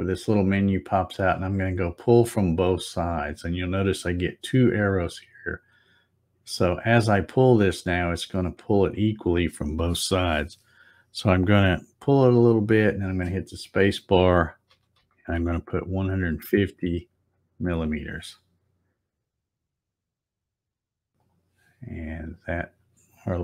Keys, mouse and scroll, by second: 2.5 click, 6.5-13.2 drag, 13.0 space, 20.0 click, 20.6 click, 21.2 click, 22.3 click.